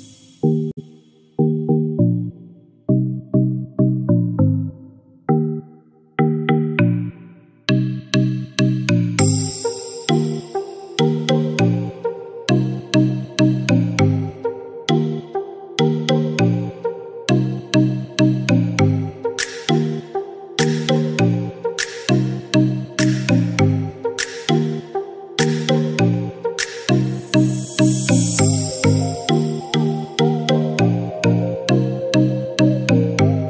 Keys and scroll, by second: 1.2 ctrl+-, 28.7-29.3 typing, 33.1 typing.